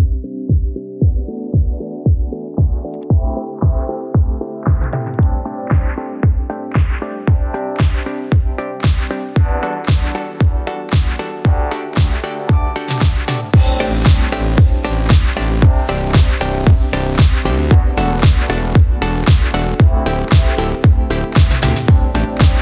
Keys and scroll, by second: 0.8 shift+Up, 3.7 ctrl+g, 7.7 Return, 9.4 Return, 10.5 ctrl+g, 14.5 ctrl+g, 20.5 ctrl+h, 21.4 ctrl+h, 22.5 Tab.